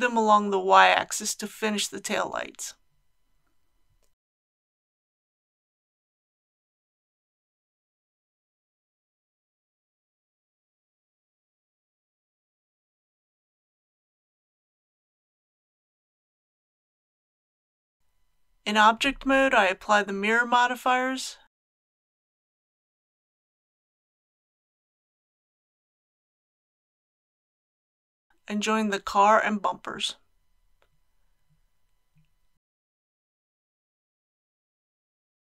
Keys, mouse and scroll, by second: 5.7 click, 6.4-8.3 middle drag, 8.5 e, 8.8 y, 12.3 shift+click, 13.2 alt+a, 18.1 Tab, 18.8-19.4 scroll down 1, 19.6 shift+middle click, 20.5 middle click, 23.7 ctrl+a, 24.9 click, 25.9 ctrl+a, 30.2 ctrl+click, 32.3 ctrl+j, 34.5 click, 34.9-35.3 typing.